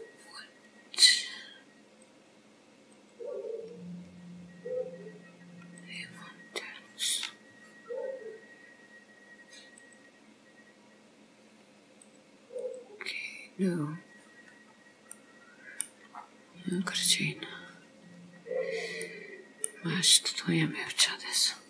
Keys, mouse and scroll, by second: 2.1 click, 3.1 click, 5.8 click, 12.0 click, 12.6 click, 14.7-15.4 scroll down 2, 15.1 middle click, 16.1-16.8 scroll up 7, 16.8 click, 17.5-18.0 scroll down 1, 18.0-18.3 scroll down 1, 18.5 scroll down 4, 19.1 middle click, 20.1 scroll up 1.